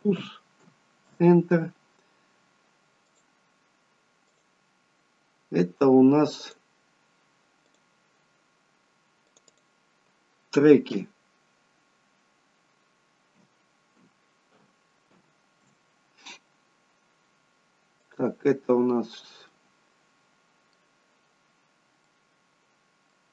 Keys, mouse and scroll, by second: 3.0 click, 4.3 click, 17.9 click, 19.4 middle click, 21.5-22.1 scroll up 1, 22.1 middle click, 22.1-22.5 scroll up 2.